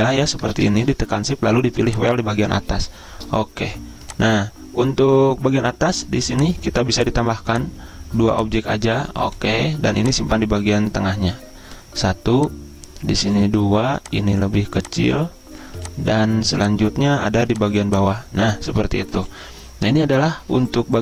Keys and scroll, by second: 0.5 ctrl+z.